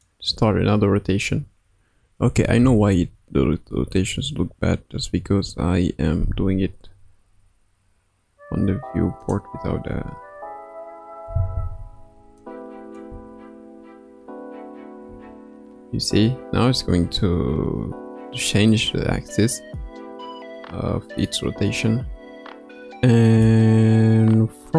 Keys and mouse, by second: 0.3 r, 2.6 middle click, 3.6 KP_1, 4.0 KP_3, 5.1 KP_9, 7.2 r, 9.8 a, 11.2 i, 12.4-13.0 drag, 13.1 space, 15.0 space, 18.7-19.8 middle drag, 21.2-23.5 middle drag.